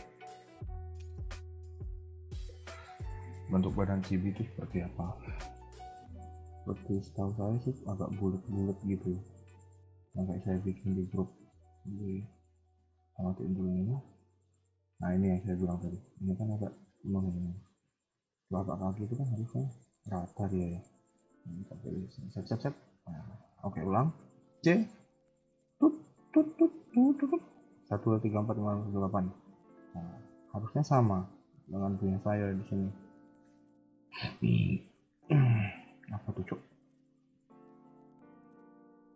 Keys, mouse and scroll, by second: 6.5 shift+middle click, 7.3-7.7 scroll up 1, 7.8 KP_1, 9.4 click, 9.8 scroll down 2, 10.1 middle click, 11.6 z, 13.2 click, 13.5-14.0 scroll down 3, 13.8 middle click, 15.0 shift+middle click, 15.4 scroll up 1, 15.6 KP_3, 17.1 middle click, 18.8-19.4 scroll up 1, 19.4 middle click, 20.0 scroll up 1, 20.7 c, 23.1-23.4 scroll down 2, 23.4 a, 23.5 a, 23.8-24.3 scroll up 1, 24.3 c, 28.8 scroll down 2, 29.0 middle click, 30.0 KP_1, 30.1 KP_3, 30.6 shift+middle click, 30.9 scroll up 2, 31.5 shift+middle click, 31.8-32.2 scroll up 2, 32.6 middle click, 35.3 KP_1, 35.5 KP_3, 36.7 middle click.